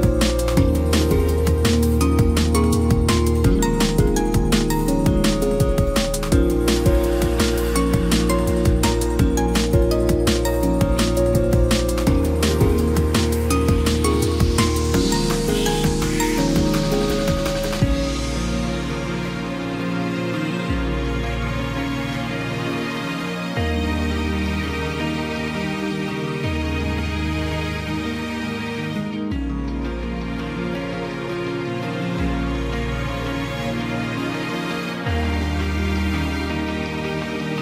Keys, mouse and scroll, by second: 1.9 ctrl+=.